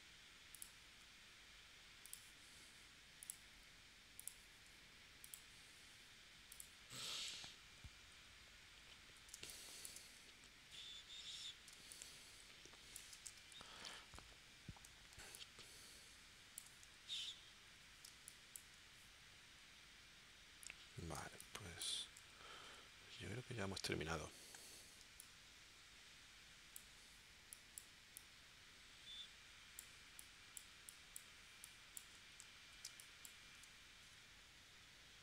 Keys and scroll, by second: 9.3 space, 11.7 space, 13.8 super+s, 15.1 space, 18.1 space, 21.2 space, 25.0 space, 32.9 space.